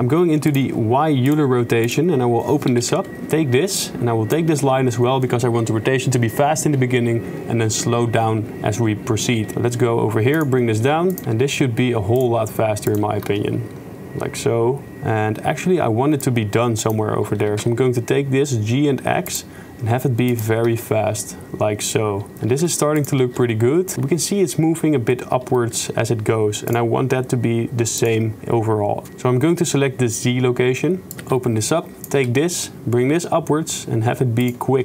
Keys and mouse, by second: 0.6 click, 1.9 click, 2.7 a, 2.8 KP_Decimal, 3.8-4.4 drag, 9.4 g, 11.1 click, 11.3 shift+space, 12.9 click, 13.3 shift+space, 14.9 shift+space, 16.3-17.0 drag, 17.4 g, 20.3 click, 20.7 shift+space, 22.6 shift+space, 23.0 click, 23.3 shift+space, 25.6 shift+space, 26.7 click, 31.1 a, 31.1 KP_Decimal, 32.0 click, 32.2 g.